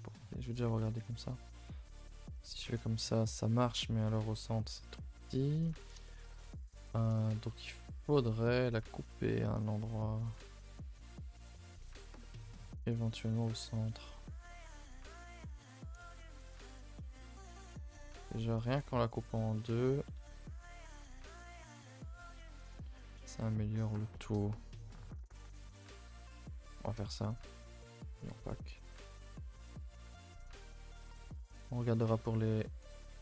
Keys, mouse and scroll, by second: 0.2 a, 1.6 u, 5.2 a, 5.7-15.2 middle drag, 16.2 a, 16.3 a, 16.5 3, 17.3 alt+Left, 17.8 2, 18.2 alt+Left, 19.5 right click, 19.7 a, 21.1 u, 24.2 middle click, 24.6-25.0 scroll up 2, 25.0 middle click, 25.8 scroll up 1, 26.1-26.8 shift+middle drag, 26.8 a, 27.6 n, 28.3 click, 30.7 n.